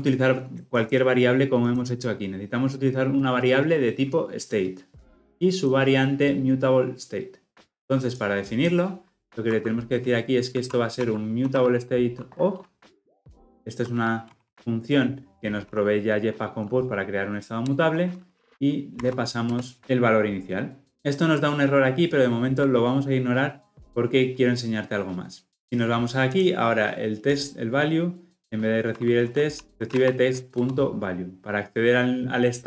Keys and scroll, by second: 17.8 Return, 30.5 Return.